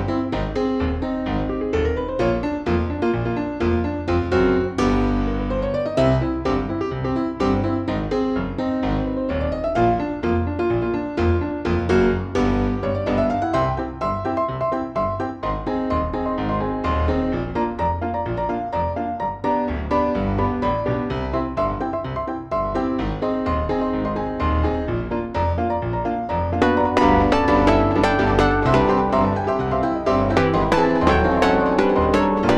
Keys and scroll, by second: 1.5 F3, 1.8 Escape, 2.4 ctrl+z, 5.8 F3, 6.8 F2, 12.8 ctrl+g, 18.5 ctrl+r, 21.5 ctrl+r, 26.0 shift+F2, 26.5 Escape, 30.7 ctrl+u, 30.8 Escape.